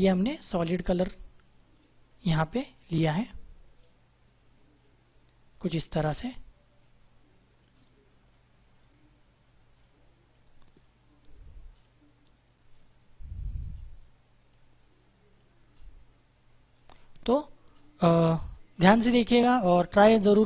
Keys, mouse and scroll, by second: 14.4 click.